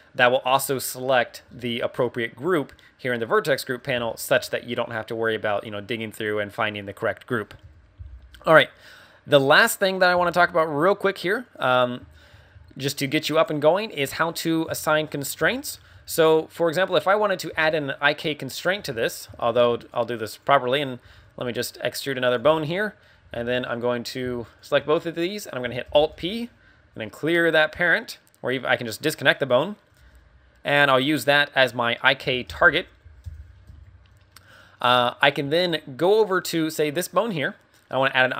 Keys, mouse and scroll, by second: 0.4-1.0 scroll down 7, 1.1-1.5 scroll up 6, 2.0-2.4 scroll up 3, 4.0 shift+middle click, 4.7 middle click, 6.0-6.8 scroll down 3, 7.6 KP_1, 9.8 KP_1, 11.1 click, 12.1 shift+middle click, 12.5 z, 12.9 right click, 13.8 right click, 14.6 z, 14.7 scroll up 2, 15.4 shift+middle click, 15.9 z, 17.4 z, 18.5 scroll down 3, 18.8 Tab, 18.9 middle click, 19.2 z, 19.5 a, 19.7 right click, 20.2 right click, 20.5 scroll up 3, 21.0 e, 22.3 click, 22.6 right click, 24.4 shift+right click, 25.8 alt+p, 29.3 scroll down 2, 29.5 middle click, 29.9 g, 31.1 click, 31.7 scroll up 3, 32.4 alt+p, 33.7 Tab, 33.9-34.3 scroll down 2, 34.3 middle click, 36.2 right click.